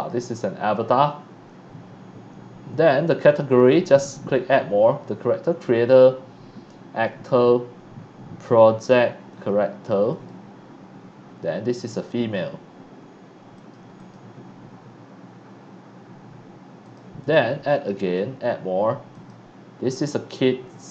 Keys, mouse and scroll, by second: 3.6 click, 9.3 click, 10.1 click, 11.7 click, 12.7 scroll up 1, 13.5 click, 14.0 click, 16.8 click, 17.2 click, 17.4 click, 18.0 click, 18.7 right click, 19.1 click.